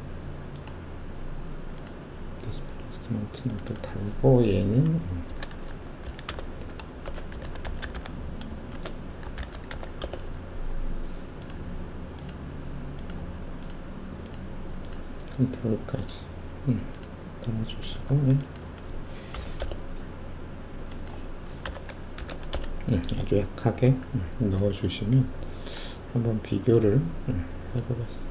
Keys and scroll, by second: 5.2-9.7 typing, 10.0 Return, 18.0 1, 18.6 2, 19.5 0, 19.6 Return, 21.6-22.3 typing, 22.5 Return.